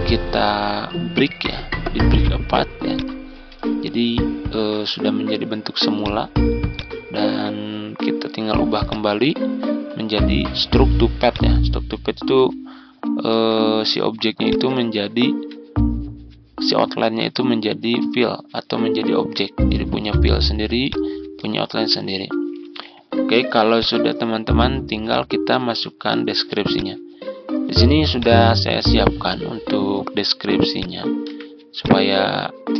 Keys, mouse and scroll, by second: 13.0 ctrl+scroll up 1, 14.4 click, 14.9 ctrl+scroll down 1, 16.1 ctrl+scroll up 1, 16.7 ctrl+scroll up 1, 18.3-18.8 ctrl+scroll down 2, 19.6-20.8 ctrl+scroll down 1, 20.8 click, 21.3 ctrl+scroll down 1, 22.7 F4, 23.6 click, 31.1 typing, 31.6 click.